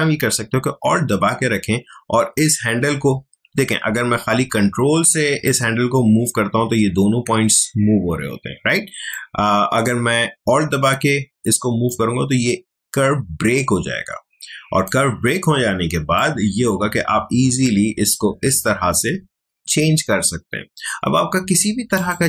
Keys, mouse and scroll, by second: 0.7 ctrl+alt+z, 5.4-11.9 ctrl+drag, 11.9-20.9 alt+drag, 21.9 click.